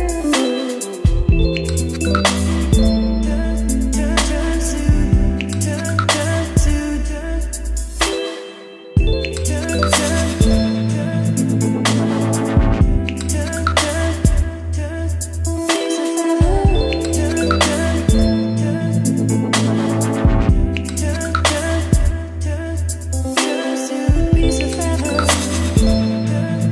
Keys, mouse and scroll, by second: 2.5 ctrl+v, 3.4-5.7 drag, 5.7-7.1 middle drag, 7.1-17.3 drag, 17.7-26.7 drag.